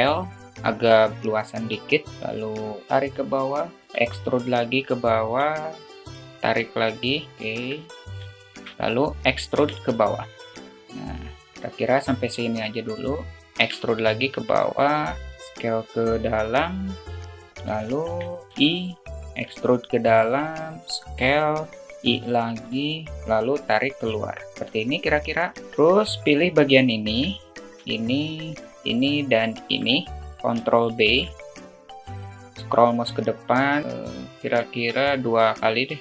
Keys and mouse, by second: 1.5 e, 2.9 click, 3.8 e, 7.4 alt+shift+middle click, 8.2 alt+shift+middle click, 9.3 e, 11.6 alt+shift+middle click, 13.3 e, 16.8 alt+middle click, 17.7 alt+z, 18.5 i, 20.1 e, 22.0 i, 23.7 click, 26.2 click, 26.8 middle click, 28.2-28.7 alt+drag, 29.3 shift+click, 29.9 middle click, 30.9 ctrl+b, 35.9 alt+middle click.